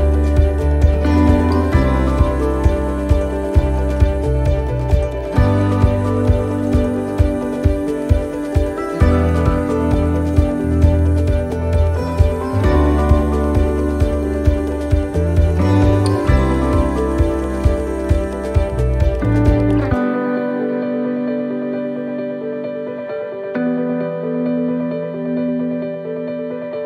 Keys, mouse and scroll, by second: 0.2 shift+middle click, 0.8-1.2 scroll down 4, 1.2 shift+middle click, 1.6-2.0 scroll up 4, 2.1 shift+middle click, 2.8 scroll down 1, 3.4 shift+middle click, 4.6 right click, 5.7 shift+d, 7.3 click, 10.6 shift+middle click, 11.1 scroll up 4, 11.6 middle click, 12.2 shift+middle click, 12.6 middle click, 13.2 shift+middle click, 13.4-13.8 scroll up 4, 13.7 middle click, 14.1-14.7 scroll down 4, 14.7 shift+middle click, 15.3 shift+d, 16.2 shift+middle click, 17.4 click, 19.8 middle click, 21.8 click, 23.7 middle click, 24.4 shift+middle click, 24.7 scroll up 2, 25.0 middle click, 26.3 click.